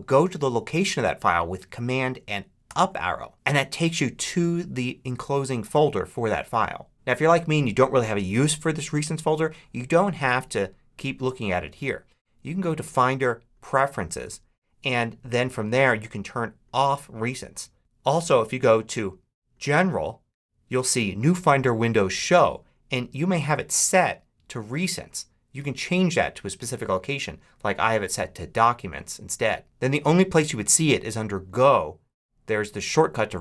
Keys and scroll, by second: 2.5 super+Up.